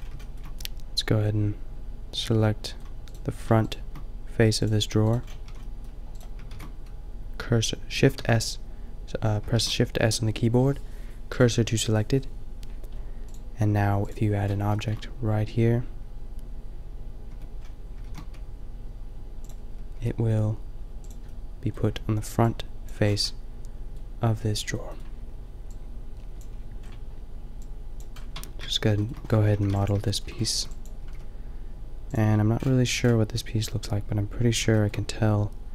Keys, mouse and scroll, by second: 3.2-5.3 middle drag, 5.5 a, 6.6 shift+s, 8.1 shift+s, 9.7 shift+s, 14.7-16.6 shift+middle drag, 17.2 Tab, 18.0 shift+a, 19.9 s, 27.2-27.9 drag, 28.2 click, 28.4 Tab, 29.5 a, 29.7 b, 31.0 b, 31.0 g, 32.3 middle click, 34.7 middle click.